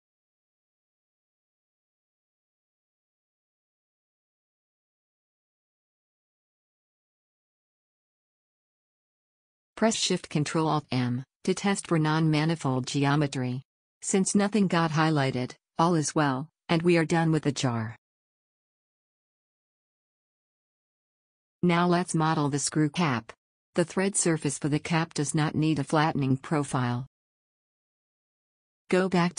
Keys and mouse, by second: 0.5 middle click, 1.8 a, 4.0 w, 5.1 click, 9.5 a, 12.5 ctrl+alt+shift+m, 13.5 z, 16.5 z, 17.9 Tab.